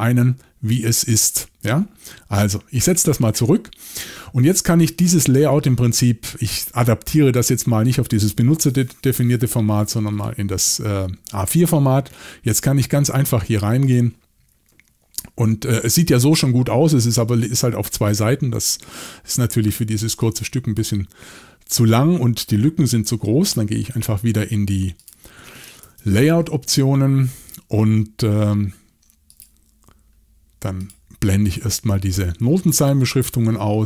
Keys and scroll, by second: 25.8 shift+super+l.